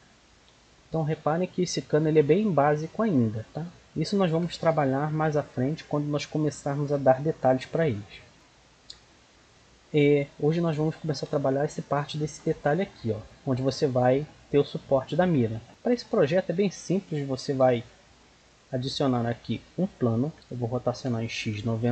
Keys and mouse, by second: 4.3 KP_1, 5.1-6.2 middle drag, 6.3 middle drag, 7.7 middle click, 7.8 h, 8.3-9.1 middle drag, 10.6 middle drag, 12.0 middle click, 12.6-13.9 middle drag, 15.9-17.5 drag, 19.7 shift+a, 20.6 r.